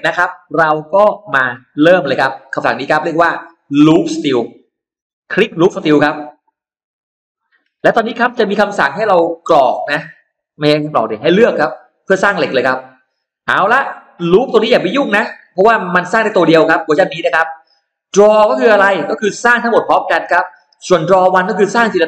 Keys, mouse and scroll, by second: 6.7 click, 7.9-9.1 drag, 9.4-9.7 scroll down 1, 9.9 scroll up 1, 10.2 middle click, 11.7 scroll up 1, 14.0 click, 14.6 click.